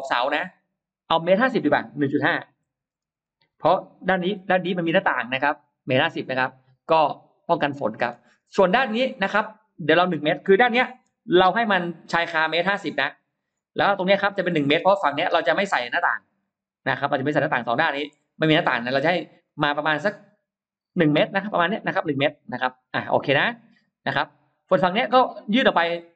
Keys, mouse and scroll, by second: 0.0 click, 2.3 1, 3.0 5, 3.5 Return, 4.7 middle click, 4.9-5.9 scroll down 4, 5.5-7.9 middle drag, 8.3 scroll up 1, 9.9-10.2 scroll up 1, 10.0 middle click, 10.9 shift+x, 11.9 click, 12.5 click, 13.9 click, 14.4 click, 15.1 click, 15.8 click, 18.0 shift+click, 19.3-23.3 shift+drag, 24.8-26.1 shift+drag.